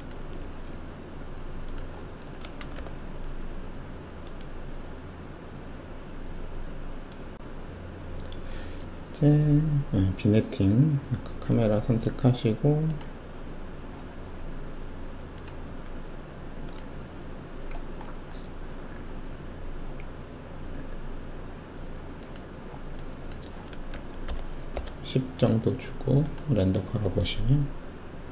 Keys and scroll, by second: 2.6 Delete, 2.7 Delete, 23.9-24.2 typing, 24.7 Return.